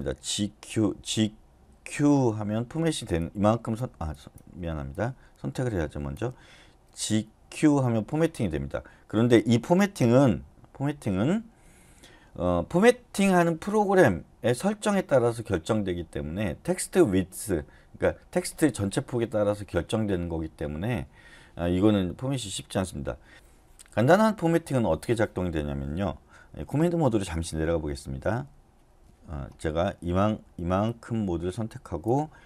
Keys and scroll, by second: 1.1-2.0 typing, 7.0 g, 7.4 q, 11.2-12.1 typing.